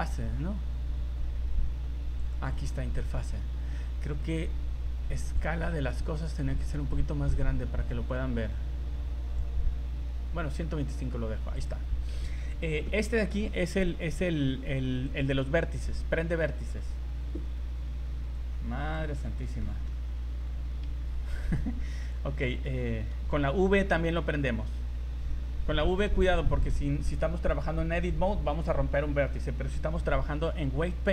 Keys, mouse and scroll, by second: 15.1 click, 18.3 click, 19.2-19.6 scroll down 2, 19.6 shift+middle click, 20.1 scroll up 1, 22.0 click.